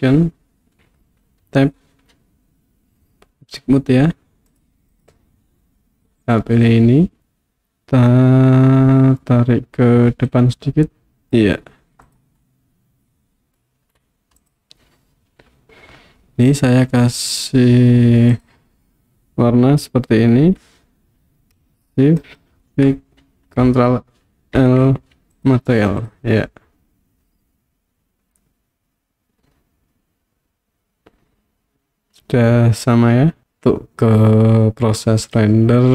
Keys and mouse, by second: 1.5 Tab, 4.6 click, 6.4-7.2 middle drag, 7.3-9.2 middle drag, 10.4 click, 12.5-13.6 middle drag, 14.4 click, 18.4 click, 22.4 shift+click, 24.6 ctrl+l, 26.0 click, 26.5-33.4 middle drag, 33.4 KP_1, 35.1 click.